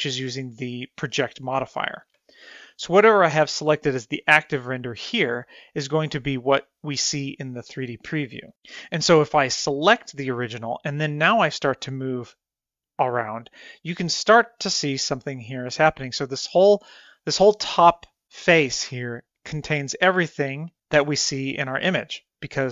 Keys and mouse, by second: 10.7 click, 12.2-14.2 drag, 15.0-16.6 middle drag.